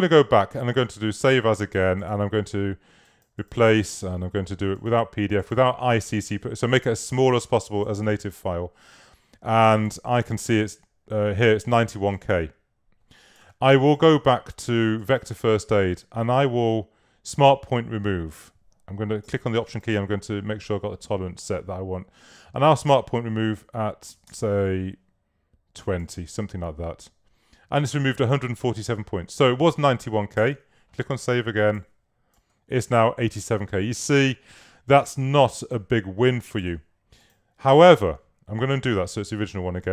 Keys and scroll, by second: 15.2 super+a, 23.9-24.9 typing, 30.4 super+s, 38.0 super+z.